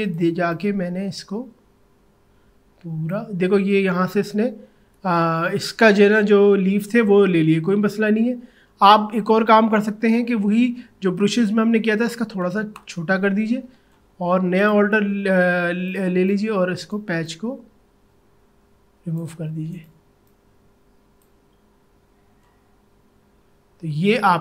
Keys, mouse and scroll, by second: 4.6 ctrl+z, 8.2 ctrl+alt+z, 11.4-12.8 typing, 14.6 alt+click, 15.9-23.8 alt+drag.